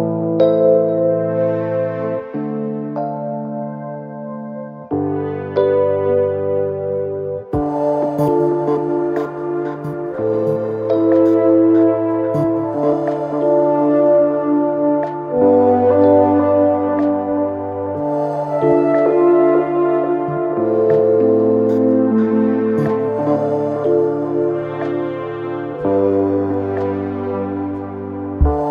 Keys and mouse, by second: 0.4 alt+middle click, 0.8 alt+click, 1.3 alt+click, 1.9 alt+click, 2.8 alt+middle click, 3.0-3.4 alt+drag, 3.8 alt+click, 7.5-8.6 drag, 10.0-10.7 alt+drag, 11.1 alt+drag, 11.8 alt+click, 12.9 click, 13.5 click, 15.1-16.6 alt+drag, 17.5 click, 19.1 click, 21.1 shift+i, 22.0 click, 22.6 r, 24.1-25.1 drag, 25.3 w, 25.8 click, 26.8 click, 28.0 alt+middle click, 28.4 alt+click.